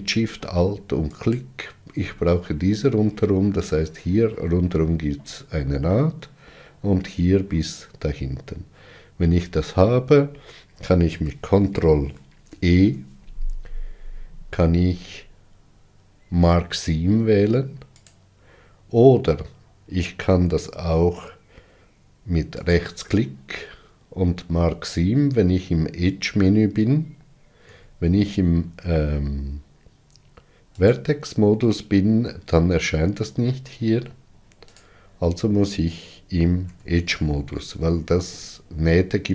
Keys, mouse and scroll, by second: 1.0 alt+shift+click, 12.4 ctrl+e, 22.5-25.5 right drag, 27.6 1, 30.7-33.7 right drag, 36.6 2.